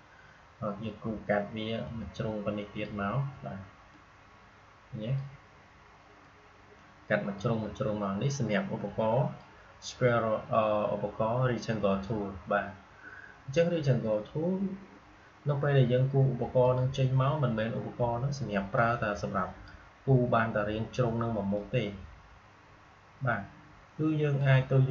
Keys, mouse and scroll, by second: 1.8-24.9 drag.